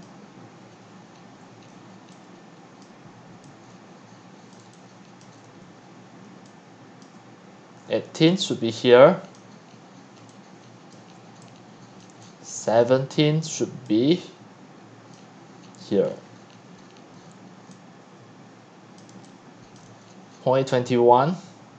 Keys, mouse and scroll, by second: 0.0-0.7 drag, 0.7 c, 1.7 q, 2.8-3.3 drag, 3.1-7.9 typing, 4.5 drag, 9.4-10.2 drag, 10.2-12.8 typing, 10.9-11.3 drag, 12.7 drag, 15.1-16.0 drag, 16.0-17.7 middle drag, 17.7-20.4 typing, 19.0 drag.